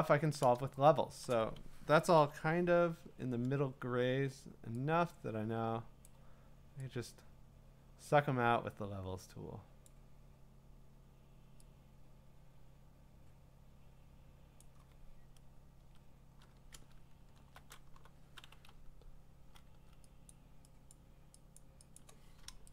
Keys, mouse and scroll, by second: 1.3 click, 2.2 ctrl+i, 6.0 click, 9.8 click, 14.6 click, 15.8 Return, 16.9-17.6 scroll, 17.8 b, 18.8-19.6 [, 19.8 [, 20.3 click, 20.9 click, 21.6 click, 22.0-22.7 click.